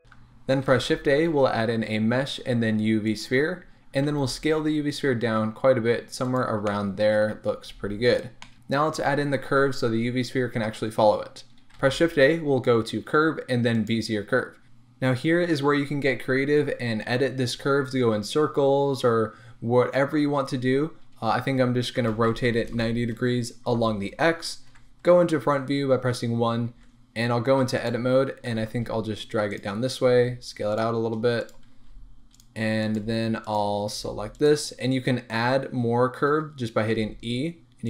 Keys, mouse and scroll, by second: 0.0 x, 0.7 shift+a, 4.1 s, 6.3 click, 6.7-8.2 middle drag, 7.2-7.7 scroll up 2, 7.7 s, 8.2 click, 8.4-13.8 middle drag, 11.7 shift+a, 21.9 r, 23.6-24.8 middle drag, 23.7 Return, 24.7 KP_1, 26.2-27.7 middle drag, 26.7 Tab, 27.7 click, 28.0-28.5 scroll up 1, 28.5 g, 29.6 click, 30.0 s, 30.8 click, 31.4 click, 31.8 s, 32.9 click, 33.0 g, 33.5 click, 33.9 g, 34.4 click, 34.8-35.6 scroll down 1, 35.8-36.9 scroll up 1, 36.9 e.